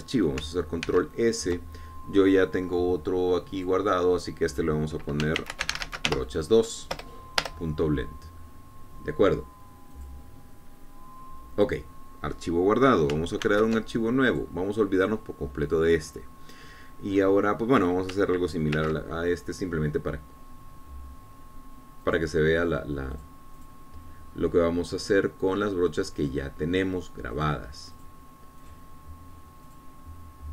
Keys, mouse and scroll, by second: 2.2 ctrl+s, 4.9 click, 6.5-7.4 typing, 8.3 Return, 11.3 click, 14.7 ctrl+n, 15.7 click, 18.0 scroll up 2, 18.5 middle click, 20.1 ctrl+5, 23.4 click, 24.5 click, 24.9 click, 27.5 click, 28.7 click, 29.3 click, 30.0 click.